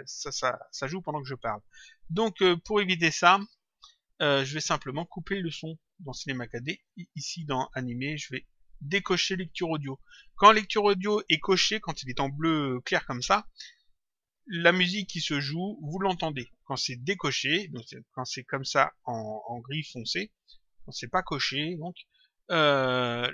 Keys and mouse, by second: 0.6 click, 3.7 click, 6.6 click, 17.0 click, 18.3 click.